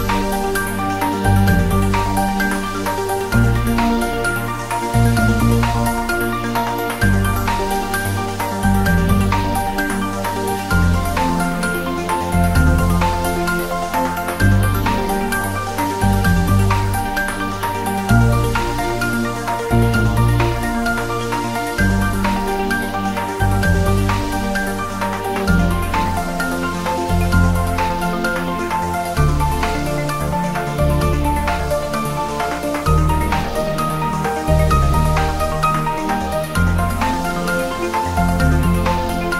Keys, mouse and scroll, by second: 0.7 scroll down 1, 3.2 click, 4.1 scroll up 1, 4.7 click, 6.0 s, 6.6 click, 7.4 z, 7.8 click, 8.1 g, 9.0 click, 10.1 s, 10.5 click, 10.6 s, 11.2 click, 11.9 s, 12.7 z, 13.2 click, 13.7 s, 14.1 z, 14.8 click, 16.3 click, 17.2 g, 18.8 click, 19.4 g, 19.9 click, 20.1 scroll up 1, 21.2-21.6 scroll down 1, 21.6 r, 21.7 Down, 22.8 Return, 23.4 g, 24.3 Down, 25.1 Return, 25.5 s, 25.9 click, 26.2 scroll up 1, 26.4 click, 27.2-28.7 drag, 28.7-29.2 scroll down 1, 29.7 click, 30.5-31.0 scroll up 1, 31.0 click, 31.3 s, 32.0 click, 32.3 g, 33.5 click, 33.7-34.2 scroll down 1, 34.2-36.1 drag, 37.6 scroll down 1, 38.5 scroll up 1.